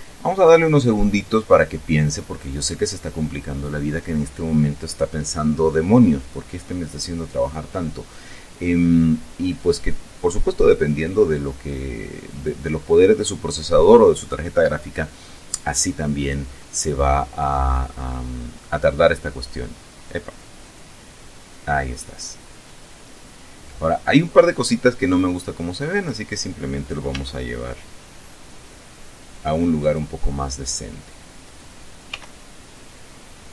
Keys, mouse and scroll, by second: 20.7 click, 22.1-22.9 scroll up 2, 23.1 scroll down 1, 24.1 scroll up 2, 24.8 scroll down 2, 26.0-27.2 right drag, 27.2 g, 29.9 click, 31.5 right click, 32.2 g.